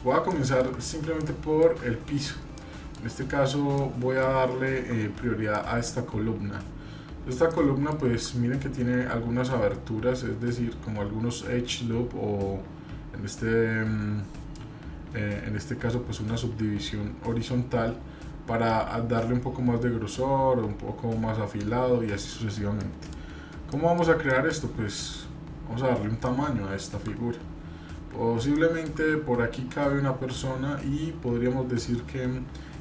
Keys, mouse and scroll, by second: 22.8-23.1 middle drag, 24.3 shift+middle click, 24.3 scroll up 1, 27.2 scroll down 1.